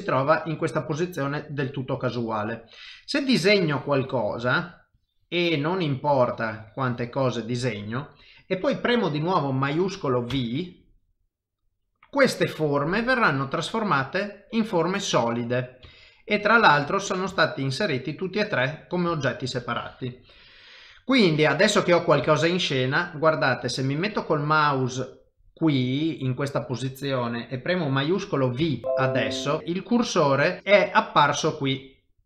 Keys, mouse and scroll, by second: 2.6 click, 12.0 middle click, 15.9 shift+middle click, 16.7 click, 17.0 click, 17.0 middle click, 17.3 shift+middle click, 17.8 middle click, 19.1 shift+middle click, 21.3 middle click, 22.3 shift+middle click, 22.8 middle click, 28.6 shift+v.